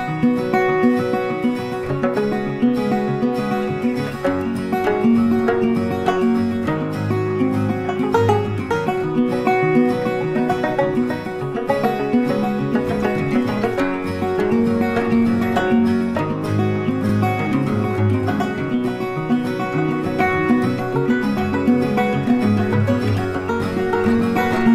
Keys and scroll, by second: 7.4 ctrl+t.